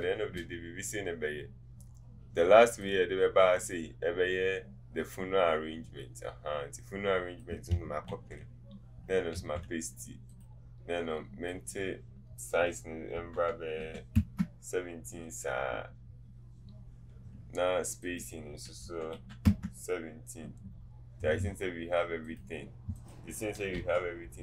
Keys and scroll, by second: 0.0 alt+space, 8.1 ctrl+v, 18.8 KP_1, 19.3 KP_7, 19.4 Return, 23.8 Up.